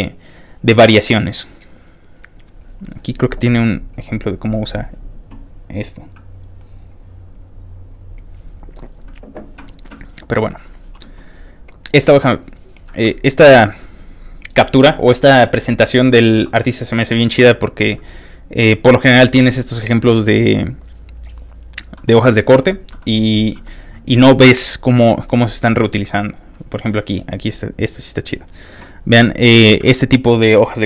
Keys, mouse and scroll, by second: 0.0 scroll up 3, 0.2-1.6 scroll down 5, 1.7 middle click, 2.1 middle click, 2.6 scroll up 1, 2.7 middle click, 2.7 middle click, 2.9 middle click, 3.2-4.0 scroll up 2, 4.3-4.8 scroll up 1, 5.1 scroll down 2, 9.2 scroll up 1, 10.6 click, 11.3 scroll down 1, 13.1 scroll down 2, 18.3 ctrl+click, 18.4-19.2 scroll down 1, 19.4-19.8 scroll down 2, 20.2-20.9 scroll down 2, 21.9 ctrl+middle click, 22.9 ctrl+middle click, 23.5 ctrl+middle click, 25.4-25.9 scroll down 3, 25.9 scroll up 1, 26.0-26.9 scroll down 1, 26.9 scroll down 1, 30.5 middle click.